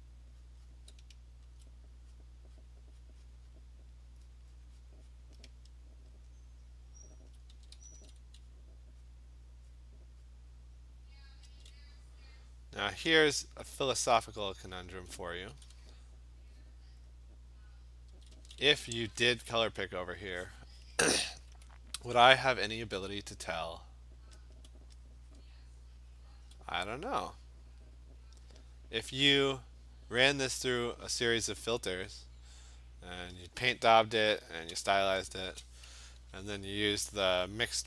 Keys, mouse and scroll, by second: 0.5 click, 0.7 click, 1.6 alt+click, 2.2 click, 2.7 click, 3.1 click, 3.3 click, 3.5 click, 4.1 click, 4.3 click, 4.6 click, 4.9 click, 5.2 click, 5.7 alt+click, 6.3 alt+click, 7.3 alt+click, 7.5 [, 7.7 [, 8.0 [, 8.5 click, 9.1 click, 9.8 click, 10.3 click, 10.3 alt+click, 11.0 click, 11.2 click, 11.3 alt+click, 11.4 click, 11.4 [, 12.5 click, 13.6 click, 14.9-15.6 alt+click, 14.9 [, 15.6 ], 15.8 ], 16.2 click, 16.7 click, 17.1 click, 17.5 alt+click, 17.7 click, 18.1 alt+click, 18.1 [, 18.3 [, 18.7 [, 24.6 alt+click, 25.5 click, 26.9 click, 28.9 click, 29.7 click, 29.7 click, 29.8 click, 31.8 click, 35.3 click, 35.4 click, 35.5 click, 35.5 click.